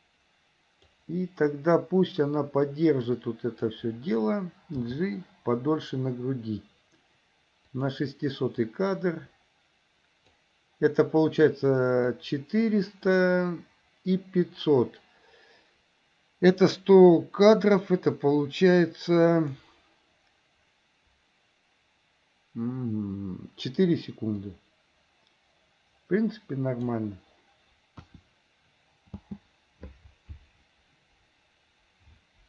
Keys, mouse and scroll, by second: 3.3-3.8 drag, 5.0 g, 8.9-10.6 drag, 12.3-19.7 drag, 24.6-27.1 drag, 28.1 KP_1, 29.3 space.